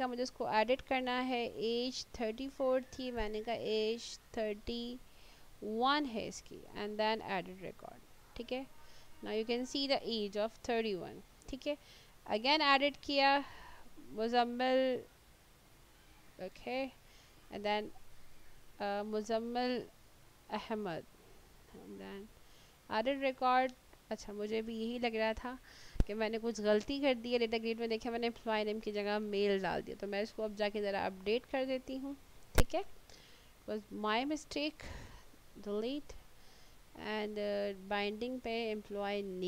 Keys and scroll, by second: 3.3 BackSpace, 5.7 1, 19.6-20.9 typing, 35.5 Delete.